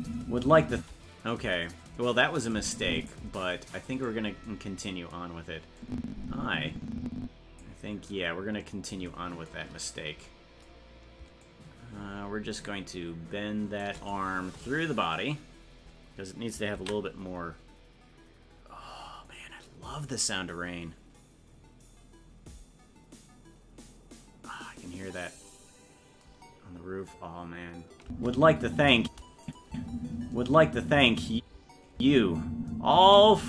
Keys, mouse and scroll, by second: 2.5 click, 4.0 right click, 5.8-7.6 drag, 11.4-13.8 shift+drag, 17.2 ctrl+s, 28.0 space, 29.4 click, 29.4 space, 29.7 space.